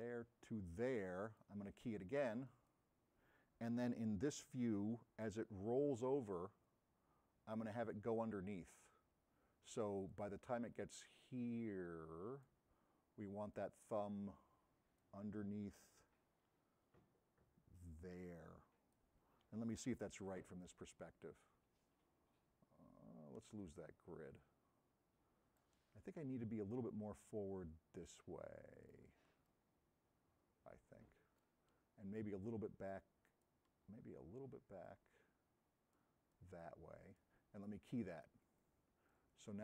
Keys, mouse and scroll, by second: 20.0-25.7 right drag, 20.0 s, 26.8-29.0 drag, 29.2 s, 29.5-31.5 right drag.